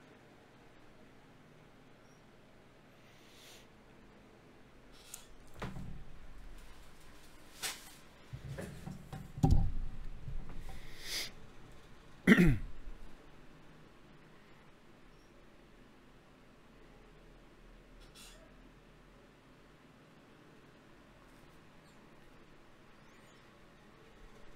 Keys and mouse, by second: 0.7 click, 0.9 g, 1.9 g, 4.9-6.9 right drag, 6.9 g, 8.5 e, 9.9 ctrl+Tab, 11.9-12.3 f, 12.5 f, 14.1-15.4 right drag, 15.4 f, 15.8 right click, 16.5 f, 16.6 right click, 17.3 f.